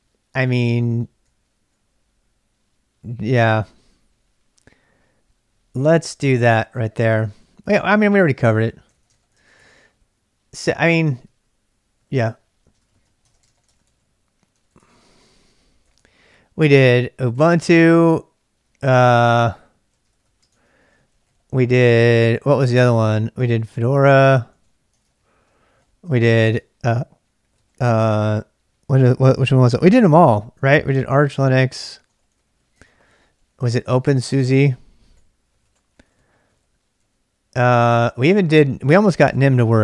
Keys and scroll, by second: 0.0-1.7 typing, 3.5 k, 4.1 k, 5.5-17.4 typing, 18.8-39.8 typing.